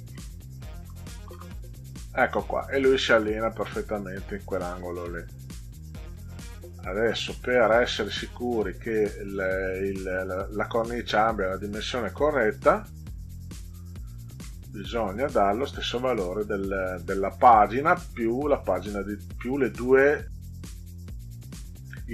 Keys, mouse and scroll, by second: 0.0 -, 0.8 5, 1.3 Return, 1.5 click, 4.1 scroll down 4, 5.8 click, 6.5-7.0 ctrl+scroll down 2, 7.6 middle click, 12.3 click, 13.9 ctrl+scroll up 2, 18.0-21.4 drag.